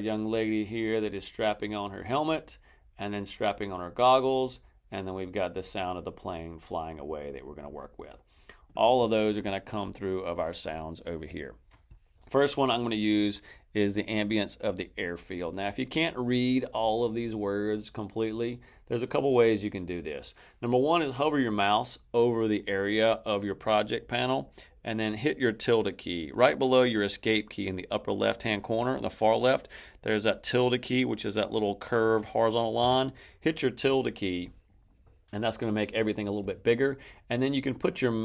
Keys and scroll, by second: 32.7 `.